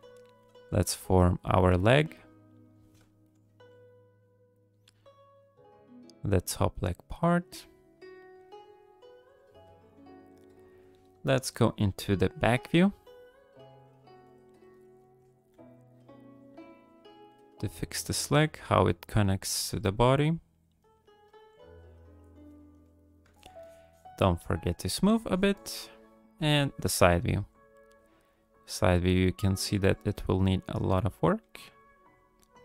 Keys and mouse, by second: 0.0 click, 0.4 f, 1.0-2.0 drag, 2.3 click, 3.1 shift+click, 3.4 f, 4.1 click, 5.2 click, 6.2 click, 6.8 click, 7.5 click, 8.4 click, 8.8 click, 9.6 f, 10.1 click, 12.1 KP_9, 13.2 shift+click, 13.8 click, 15.0 ctrl+click, 15.2 click, 15.5 f, 16.0 click, 16.8 click, 17.3 f, 17.8 click, 18.6 click, 18.9 middle click, 19.5 f, 19.9 click, 20.8 middle click, 20.9 click, 21.2 f, 21.7 click, 22.3 click, 22.7 click, 23.3 shift+click, 23.6 shift+click, 24.2 shift+click, 24.7 middle click, 25.1 shift+click, 25.3 shift+click, 25.5 shift+click, 26.3 KP_3, 27.2 f, 28.5-29.8 drag, 29.9 f, 30.6 click, 31.4 f, 31.9 click.